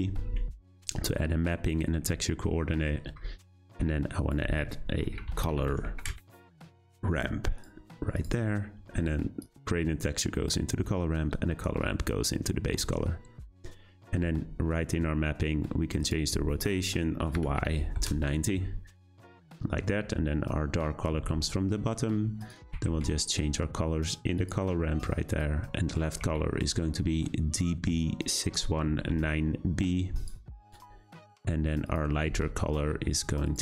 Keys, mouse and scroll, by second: 3.4-7.6 drag, 9.4-10.4 drag, 11.8-12.7 drag, 17.9-19.2 drag, 31.9-33.6 drag.